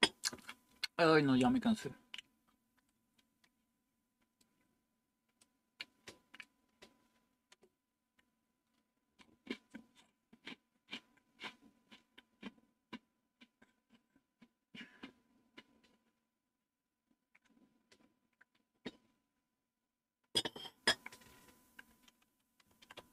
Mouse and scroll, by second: 2.8-4.7 right drag, 5.3-6.3 right drag.